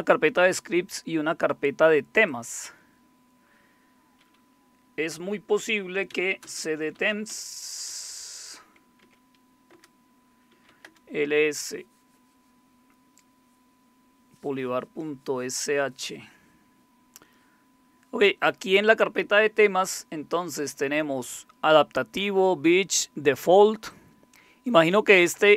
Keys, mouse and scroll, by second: 0.6 click, 2.0 click, 2.3 click, 5.8-7.9 typing, 9.0 Tab, 9.7 Return, 10.2-12.1 typing, 23.9 click.